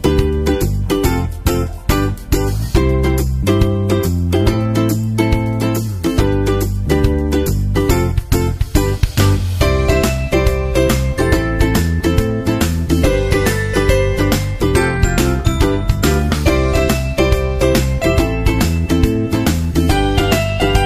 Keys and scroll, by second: 0.2 super+Right, 9.9 shift+super+Left, 15.6 super+Right, 19.6 super+Right.